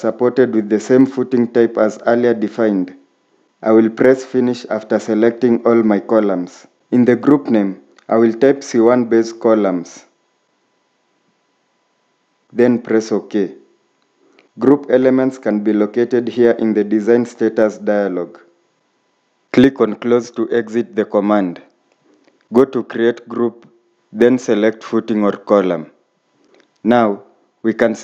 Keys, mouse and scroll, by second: 0.2 middle click, 1.0-2.4 scroll up 1, 7.0-7.4 typing, 8.6-11.4 typing.